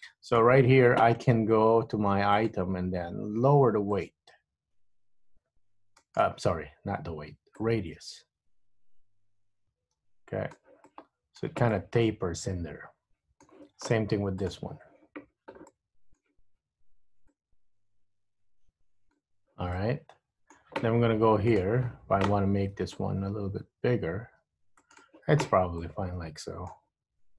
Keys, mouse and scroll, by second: 2.5 click, 4.0 click, 7.7 click, 11.0 middle click, 11.9 middle click, 14.6 click, 15.8 middle click, 17.4 click, 19.9 middle click, 21.6 click, 23.1 click, 26.0 middle click.